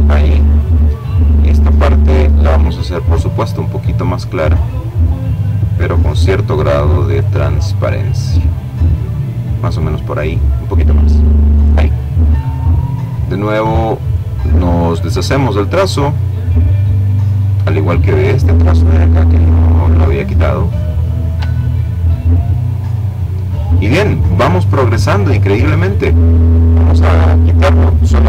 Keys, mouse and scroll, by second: 1.3-3.2 drag, 3.4-4.5 drag, 5.5 click, 6.9 click, 8.8 click, 12.2 click, 13.2 click, 13.9 click, 15.3 click, 16.1 click, 18.1 click, 20.1-20.6 ctrl+scroll down 2, 21.1-21.6 ctrl+scroll down 2, 21.6 ctrl+click, 24.3 click, 27.0 Delete.